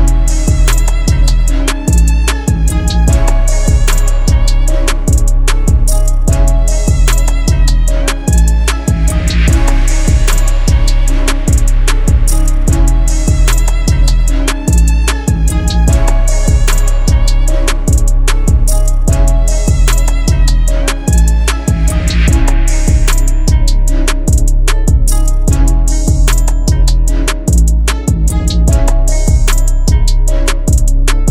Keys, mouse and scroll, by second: 28.4 double click.